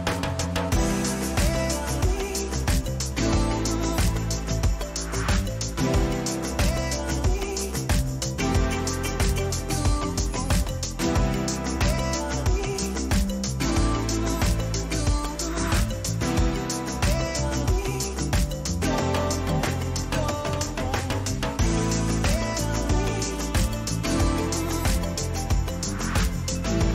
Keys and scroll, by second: 0.3 ctrl+t, 12.6 Return, 13.3 ctrl+-, 14.1 ctrl++, 19.1 ctrl+a.